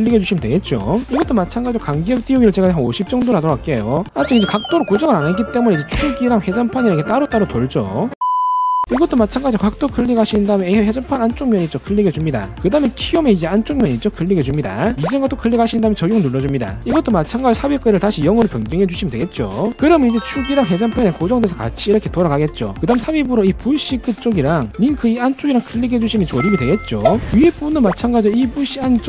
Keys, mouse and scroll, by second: 0.5 click, 2.8 5, 4.5 middle click, 5.3 click, 5.7 middle click, 5.9 shift+middle click, 6.3 click, 6.8 click, 7.2 click, 8.8 click, 10.3 click, 10.8 scroll up 1, 11.2 scroll down 1, 11.5 shift+middle click, 12.0 scroll up 1, 12.5 click, 13.0 shift+middle click, 13.6 middle click, 14.7 click, 17.2 click, 21.0-22.5 drag, 23.0 click, 23.4 scroll up 1, 23.6 middle drag, 24.5 click, 26.3 click.